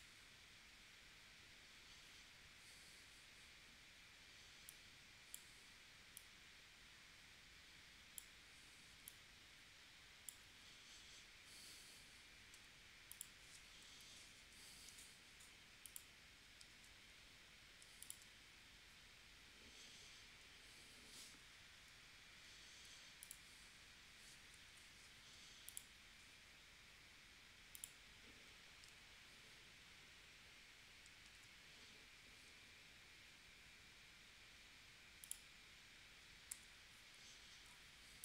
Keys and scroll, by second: 12.6 a, 13.9 p, 16.7 super+z, 22.8 v, 24.7 p, 31.2 super+z, 36.5 v.